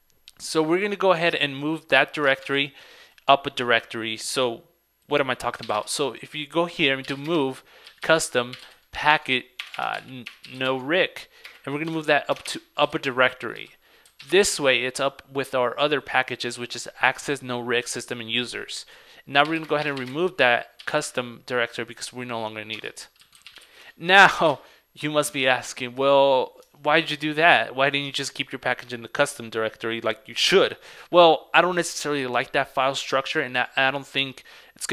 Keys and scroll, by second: 2.4 super+c, 2.6 super+Tab, 25.4 super+Tab.